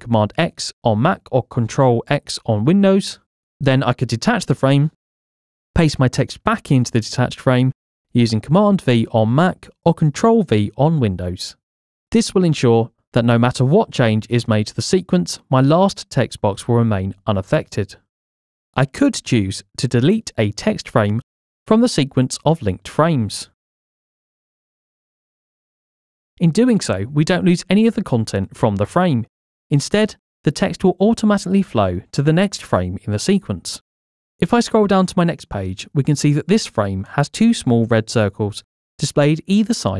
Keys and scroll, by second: 9.3 super+v, 25.8 Delete.